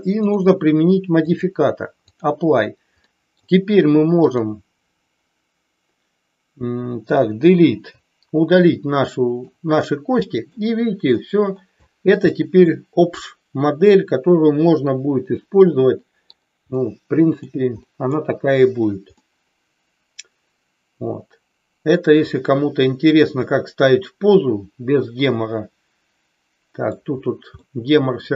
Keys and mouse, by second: 0.2 click, 1.3 click, 3.0-3.3 middle drag, 7.6 Delete, 8.6 middle click, 10.1 middle click, 11.1 middle click, 11.8-12.7 middle drag, 13.2-16.3 middle drag, 16.7 middle click, 17.8 middle drag, 19.1-22.0 middle drag, 23.5-26.8 middle drag, 27.6 middle click.